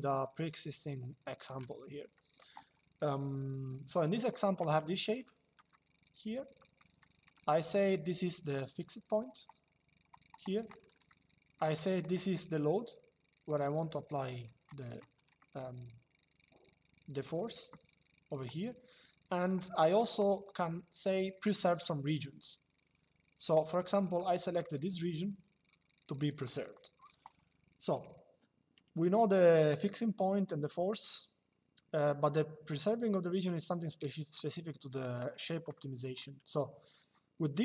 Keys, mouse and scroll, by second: 1.8 middle click, 4.9 shift+middle click, 6.3 middle click, 10.8 shift+middle click, 15.1 shift+middle click, 23.9 shift+middle click, 26.1 middle click, 35.4 shift+middle click.